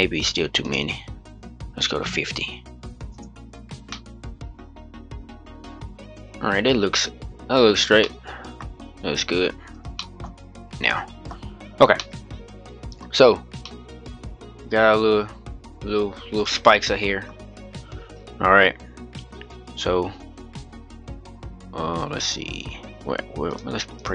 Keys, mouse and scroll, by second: 0.4-3.4 drag, 3.6-6.6 middle drag, 7.6 scroll down 1, 7.7-8.4 middle drag, 8.4-9.7 scroll up 3, 9.7 shift+middle drag, 10.0-10.8 scroll down 1, 10.8-11.2 middle drag, 11.2-11.7 scroll up 2, 11.7-16.4 middle drag, 17.7-20.7 scroll down 10, 20.7-21.3 scroll down 2, 21.3-22.4 scroll down 2, 22.4-23.2 scroll up 1, 23.2-24.1 drag.